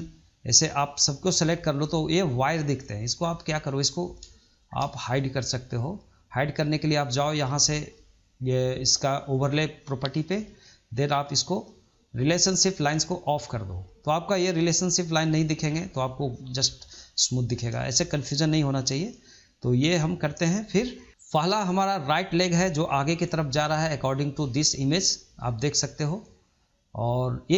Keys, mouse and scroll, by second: 20.1 click, 21.0-22.3 shift+middle drag, 22.3 click, 22.8-24.1 middle drag.